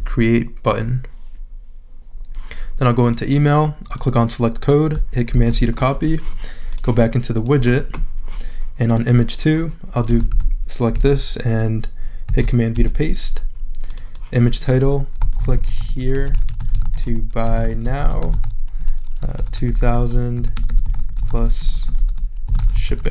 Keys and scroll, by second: 5.3 super+c, 10.3 super+a, 12.3 super+v, 12.8 super+Return, 13.5 Return, 15.0-23.1 typing.